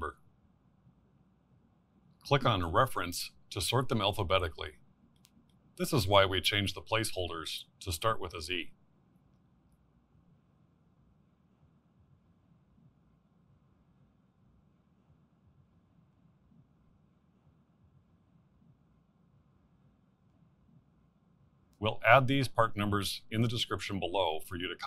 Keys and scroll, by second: 10.8 v.